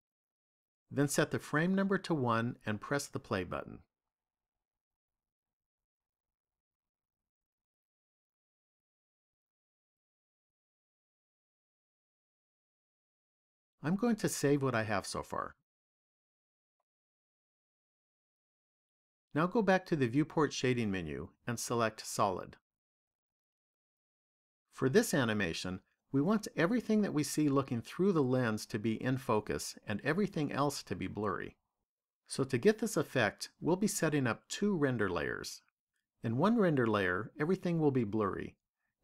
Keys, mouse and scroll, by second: 2.8 click, 4.4 click, 12.8 click, 16.0 click, 21.9 click, 24.2 click.